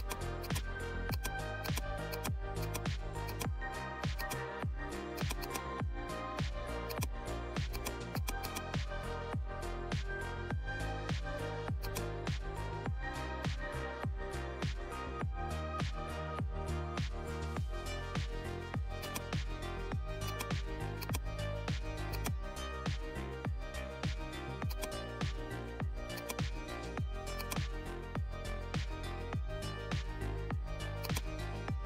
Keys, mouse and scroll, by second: 11.8 click, 18.1 scroll up 1, 18.9-30.9 drag, 31.4 right click.